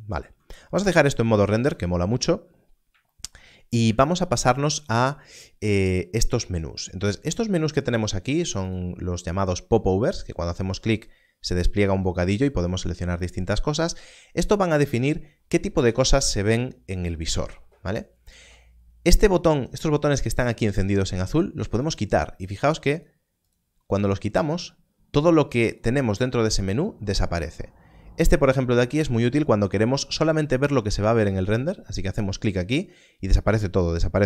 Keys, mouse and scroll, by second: 1.6 alt+a, 3.5 scroll up 1, 21.9 click.